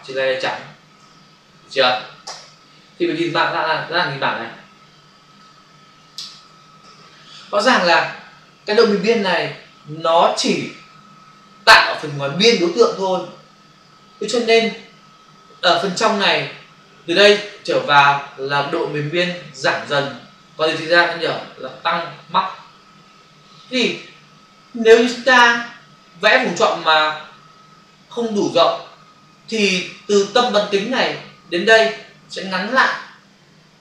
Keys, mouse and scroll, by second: 0.3 ctrl+shift+n, 0.9 Return, 2.3 alt+BackSpace, 3.3 ctrl+d, 5.3 ctrl+click.